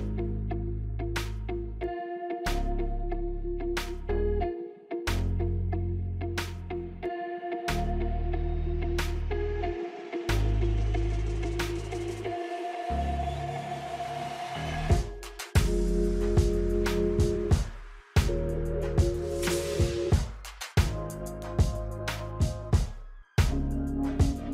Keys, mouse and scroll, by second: 0.3 alt+scroll down 1, 1.2 click, 1.5 space, 1.8 scroll down 2, 2.2-2.9 alt+scroll up 2, 2.9 click, 3.2 space, 4.0 F9, 4.8 click, 7.2-11.2 drag, 12.7 F9, 14.1 click, 15.9 scroll up 2, 16.6 space, 16.7 click, 17.0 space, 19.6 click, 19.7 alt+scroll down 1, 20.1-24.5 drag.